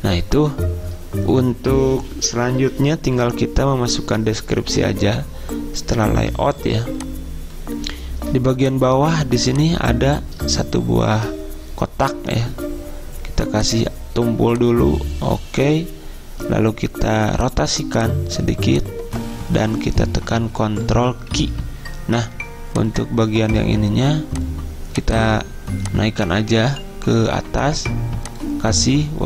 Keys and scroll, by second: 6.7 z, 21.5 ctrl+q.